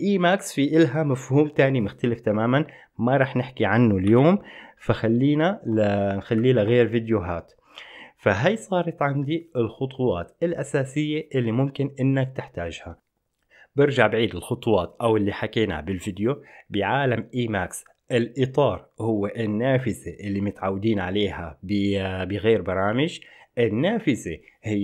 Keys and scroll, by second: 4.3 ctrl+g, 6.5 ctrl+shift+_.